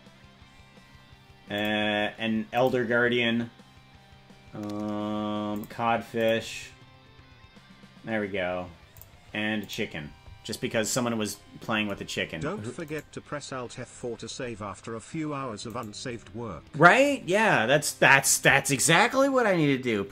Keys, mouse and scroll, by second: 0.6-1.2 scroll up 3, 1.6 click, 2.5 click, 4.2-5.0 scroll up 4, 5.6 click, 6.2 click, 7.0-7.6 scroll up 3, 9.0 click, 9.6 click, 12.9 right click, 14.1-14.7 scroll up 8, 15.9 right click, 17.0-18.3 drag.